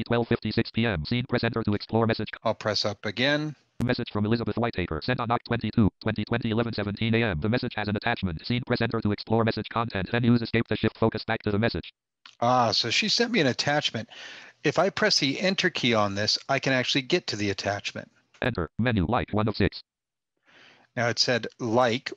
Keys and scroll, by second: 14.7 Return, 19.4 Return.